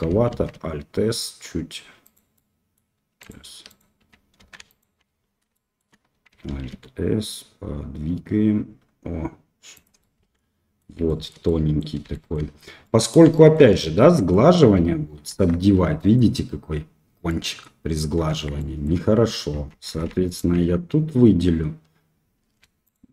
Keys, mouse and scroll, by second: 0.2 alt+s, 2.3 middle click, 3.2 alt+click, 3.6 alt+click, 4.3 3, 4.7 alt+click, 5.5 shift+middle click, 6.4 alt+s, 9.9 middle click, 11.0 shift+middle click, 11.4 middle click, 12.1 shift+middle click, 12.8 middle click, 13.3 shift+middle click, 14.0 Tab, 14.2 middle click, 15.3 ctrl+3, 15.9 middle click, 17.2-17.6 middle drag, 18.2 Tab, 18.5 middle click, 19.8 2, 20.2 alt+click, 22.8 alt+shift+click.